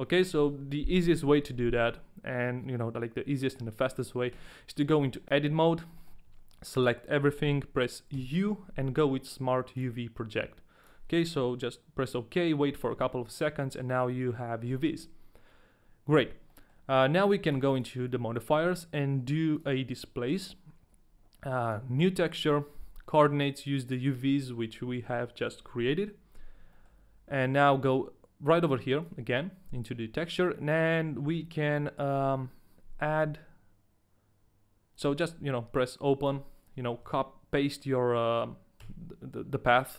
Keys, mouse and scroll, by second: 0.2 middle click, 5.5 Tab, 5.9 middle click, 6.6 a, 8.1 u, 14.1 middle click, 15.5 Tab, 16.5 middle click, 17.0 Tab, 17.0 middle click, 17.4 click, 17.7 click, 21.6 click, 23.1 click, 26.9 shift+middle click, 29.0 click, 34.9 click.